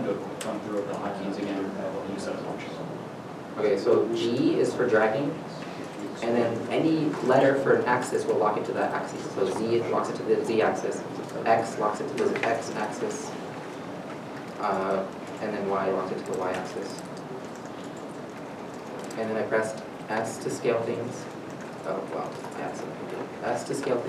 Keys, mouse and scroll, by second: 1.6 middle click, 2.1-2.4 scroll down 1, 2.6 scroll down 1, 8.4 z, 11.2 z, 12.9 right click, 13.3 middle click, 13.3 scroll down 1, 13.8 g, 14.4 x, 15.0 right click, 15.5 right click, 15.6 middle click, 15.8 g, 15.8 y, 17.1 y, 17.9 middle click, 18.1-18.5 scroll up 1, 18.8-19.3 scroll down 1, 20.1-20.6 scroll down 1, 20.6 middle click, 20.7 s, 21.9 right click, 22.2 ctrl+z, 22.4 ctrl+z.